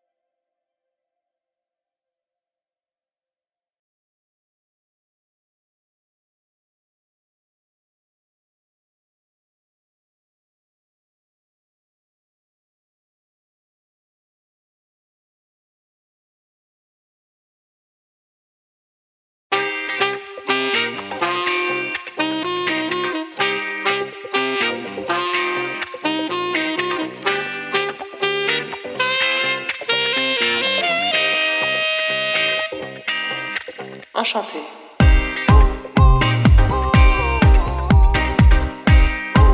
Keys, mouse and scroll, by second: 1.9 click, 3.5 middle click, 3.5-4.0 scroll down 4, 4.2-5.0 scroll up 11, 4.5 middle click, 5.1 middle click, 5.9 click, 8.5 scroll up 3, 8.7 middle click, 9.6 scroll down 3, 9.9 middle click, 10.3 scroll up 1, 11.2 scroll up 3, 11.4 middle click, 12.0 click, 14.6 click, 15.8 scroll up 1, 16.1 middle click, 16.8 click, 17.4 click, 19.9 middle click, 20.8 scroll up 2, 21.2 click, 25.2-26.4 scroll down 11, 25.4 middle click, 26.0 middle click, 26.5 middle click, 26.9-27.5 scroll up 6, 29.4 click, 30.2 KP_1, 30.6 scroll up 3, 31.4 click, 32.4-33.2 scroll down 8, 32.6 middle click, 33.6 click, 34.4 click, 35.0-35.4 scroll up 5, 35.4 middle click, 35.8 scroll down 3, 36.4 shift+a, 39.2 scroll up 6, 39.4 middle click.